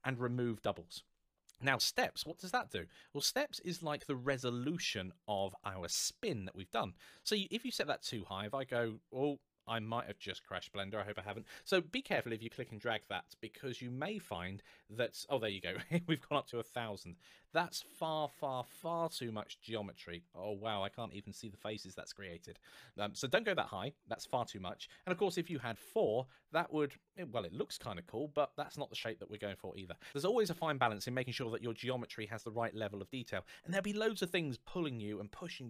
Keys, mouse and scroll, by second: 1.9 click, 7.2 click, 17.0-17.9 scroll up 1, 18.8-20.1 scroll up 1, 20.1-20.7 scroll down 1, 20.7 middle click, 23.2 click, 25.1 KP_4, 25.3 Return, 25.9-26.7 scroll down 1, 26.7 middle click, 31.9-32.3 scroll up 1, 32.3 middle click.